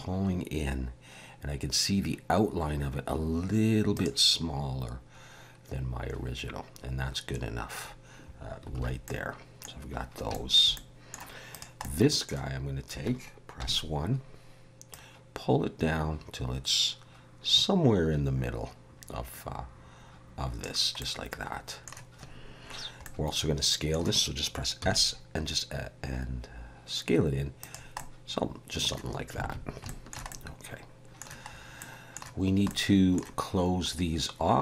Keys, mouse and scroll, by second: 4.5-7.8 scroll up 4, 8.8 alt+a, 9.0 middle click, 9.8-10.3 scroll down 3, 10.3 shift+middle click, 10.7 middle click, 11.5 click, 11.8 middle click, 13.6 KP_1, 14.9 click, 21.0 middle click, 23.0 middle click, 24.9 s, 27.9 middle click, 29.4 alt+a, 29.8 shift+middle click, 30.3 middle click, 31.5 scroll up 1, 31.8 middle click, 32.7 middle click.